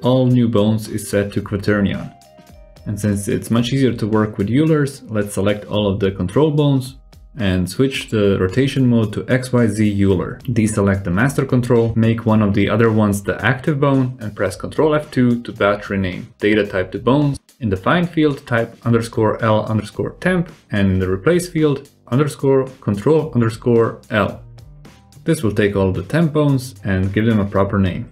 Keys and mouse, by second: 0.3 alt+z, 0.5-1.3 drag, 1.3 middle click, 1.4 click, 1.9 alt+z, 4.2-4.5 shift+drag, 5.5-6.4 shift+drag, 7.2 ctrl+r.